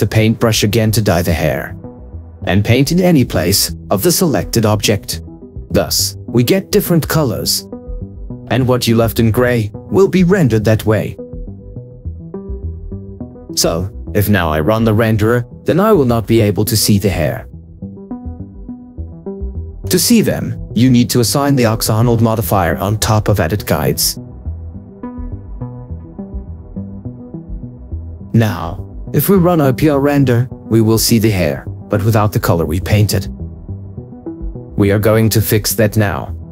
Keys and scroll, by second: 21.9 ctrl+4, 28.2 ctrl+4.